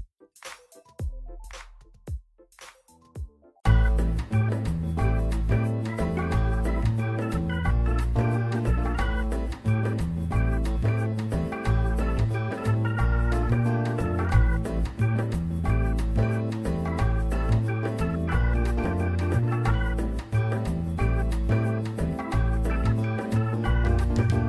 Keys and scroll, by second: 6.5 1, 7.9 w.